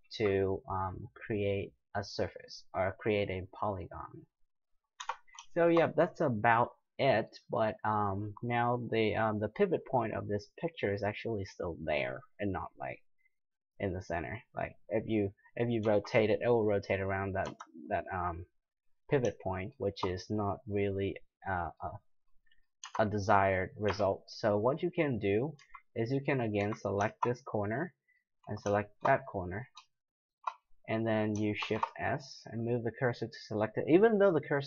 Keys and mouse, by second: 5.0 Tab, 5.5-7.3 middle drag, 13.7 click, 14.0 drag, 15.8 r, 19.5-22.3 middle drag, 22.8 Tab, 23.9 a, 24.9 middle click, 25.6 z, 26.1 middle click, 26.6 z, 31.6 shift+s.